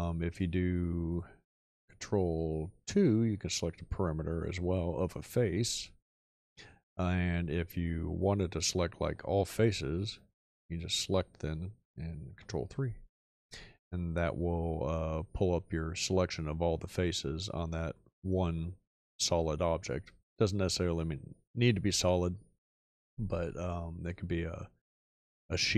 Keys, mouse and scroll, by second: 2.8 ctrl+2, 12.3 ctrl+3.